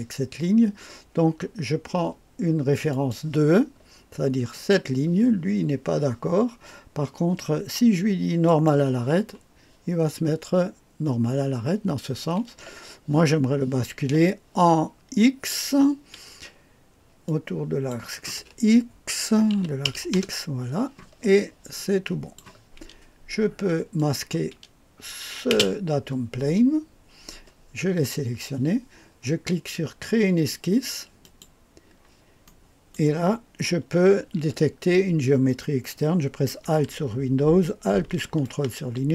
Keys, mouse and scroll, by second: 2.9 click, 4.5 click, 8.4 click, 17.2 click, 19.5 KP_9, 19.8 KP_0, 20.1 Return, 21.7 click, 23.9 click, 25.5 space, 31.2 click, 32.4 right click, 38.4-39.1 ctrl+alt+drag.